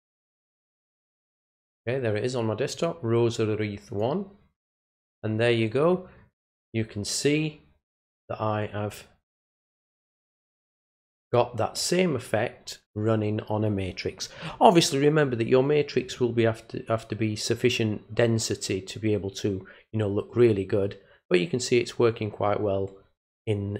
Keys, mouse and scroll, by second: 2.7 click, 3.9 click.